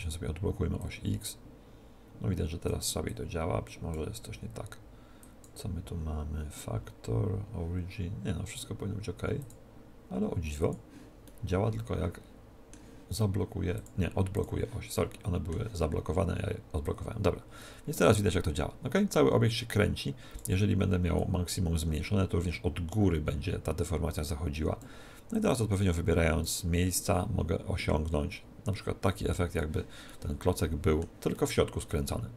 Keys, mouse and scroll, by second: 3.1 click, 5.2 click, 9.4 click, 11.3-12.3 middle drag, 12.5 middle click, 13.7-16.2 drag, 14.9-16.8 middle drag, 16.8 click, 21.1 click, 25.3-29.0 drag, 30.1-32.3 middle drag.